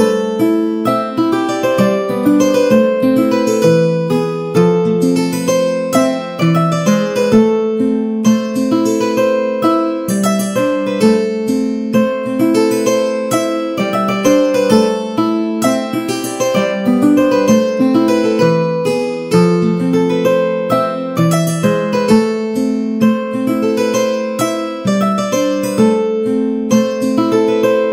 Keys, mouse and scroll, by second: 2.2-3.4 drag, 5.4 3, 6.3 middle click, 6.6 shift+middle click, 8.2 middle click, 9.0 e, 12.3 click, 12.9 3, 13.5 shift+middle click, 18.4 Tab, 18.7 middle click, 19.6 click, 19.6 a, 20.1 s, 21.5 right click, 22.6 ctrl+a, 23.0 middle click, 23.5 a, 23.7 click, 24.0 middle click, 24.6 g, 26.1 shift+d.